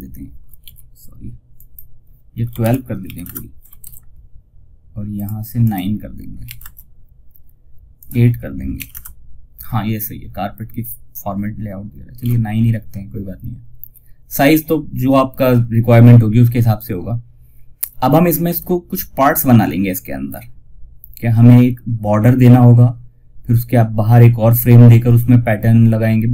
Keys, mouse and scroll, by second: 0.8 click, 1.9 shift+Left, 3.1 shift+F2, 4.4 click, 8.2 click, 11.5 ctrl+z.